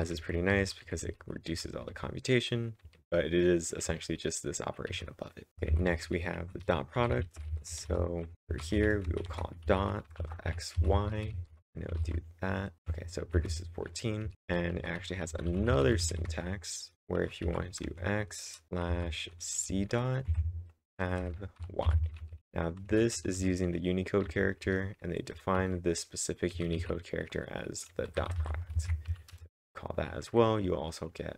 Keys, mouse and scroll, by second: 0.0-2.8 typing, 5.3-11.9 typing, 12.8 Return, 12.8 Up, 12.8 ctrl+´, 12.8 ctrl+1, 13.3 ctrl+1, 14.0-21.6 typing, 20.3 Tab, 22.7-28.3 typing, 28.8 ctrl+`, 29.1 Up, 29.4 Return.